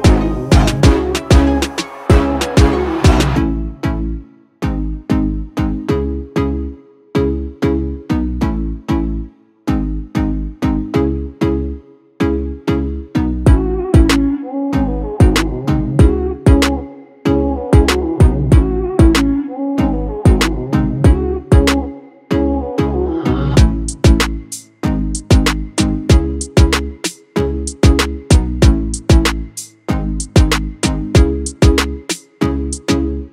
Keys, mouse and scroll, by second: 0.6-6.4 drag, 7.2 right click, 8.2 click, 14.2 ctrl+space, 14.7 ctrl+space, 15.5 ctrl+click, 16.0 ctrl+space, 16.7-20.4 drag, 20.4 click, 20.9-21.6 alt+scroll down 1, 21.8 space, 22.2 click, 22.3 ctrl+click, 23.2 click, 23.8-26.6 ctrl+drag, 27.3 ctrl+click, 27.6 ctrl+space, 28.6 ctrl+space, 28.7 ctrl+click, 29.1 ctrl+space, 29.7 click, 29.9 space, 31.3 click, 32.9 ctrl+z.